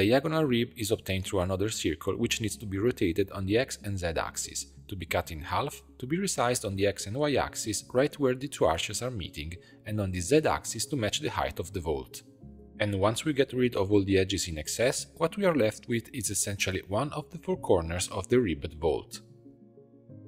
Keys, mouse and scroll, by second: 1.6 r, 3.5 click, 3.8 b, 5.2 x, 6.5 s, 9.6 s, 12.6 2, 12.8 click, 13.5 ctrl+click, 14.0 x, 15.0 Tab, 15.2 middle click, 16.0 click, 16.4 Tab, 16.7 2, 17.1 click, 17.9 ctrl+click, 18.4 x, 19.4 Tab, 19.6 middle click.